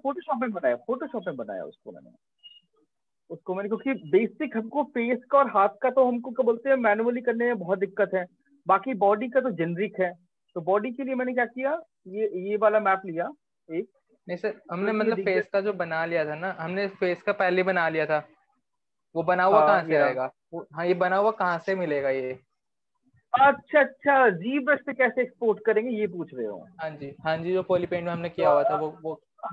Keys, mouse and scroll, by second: 0.2 click, 0.6-1.1 scroll, 1.8-2.9 scroll, 10.3-12.0 drag, 15.0 Return, 17.3 click, 20.2-22.4 drag, 23.4-26.8 drag, 27.9 click.